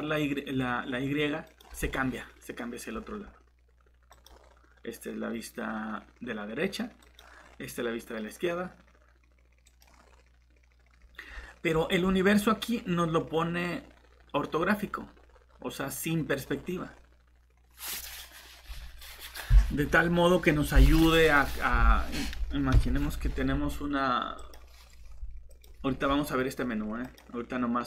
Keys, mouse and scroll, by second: 11.2 scroll down 1, 12.0 scroll up 1, 22.7 Delete, 24.4 click.